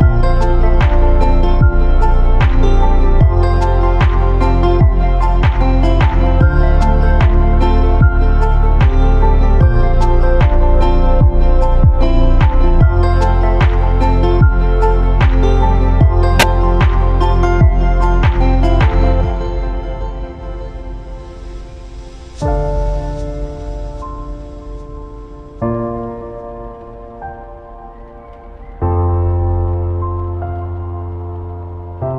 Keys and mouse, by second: 3.6-8.7 middle drag, 10.0-12.2 middle drag, 15.7 middle click, 15.9 KP_2, 16.7 KP_Decimal, 19.9-20.8 middle drag, 21.3-22.3 middle drag, 22.4 Tab, 22.8 middle click, 23.4 Tab, 25.0-25.4 middle drag, 25.9-26.3 middle drag, 27.2 Tab, 27.7 Tab, 29.2 ctrl+a.